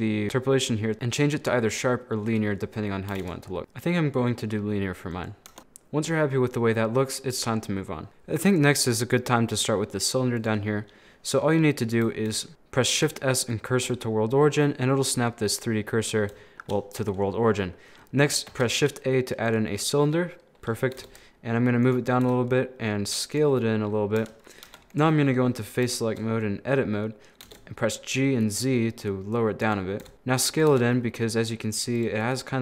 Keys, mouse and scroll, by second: 0.9-2.4 drag, 3.1 g, 5.5 Tab, 5.6-7.4 middle drag, 7.4 scroll up 2, 7.6 middle click, 10.8-12.3 middle drag, 12.3 shift+s, 13.1 shift+s, 14.3 middle click, 15.0-15.6 scroll up 4, 15.6-17.4 middle drag, 17.4 scroll down 1, 17.5-18.5 middle drag, 18.5 shift+a, 19.8 scroll down 1, 19.9-21.0 middle drag, 21.0 g, 22.3 s, 23.6 middle click, 24.2 Tab, 24.6 3, 24.9 right click, 25.3 middle click, 25.6-26.0 scroll down 3, 26.0-27.4 shift+middle drag, 27.4 g, 30.0 s, 30.7 Tab, 31.1-32.3 middle drag.